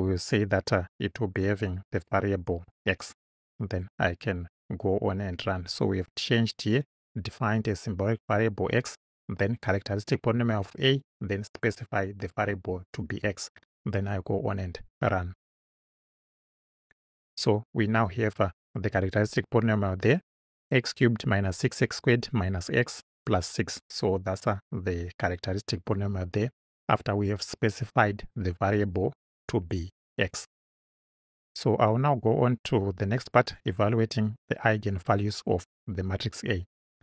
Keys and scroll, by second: 1.5 ,, 2.7 x.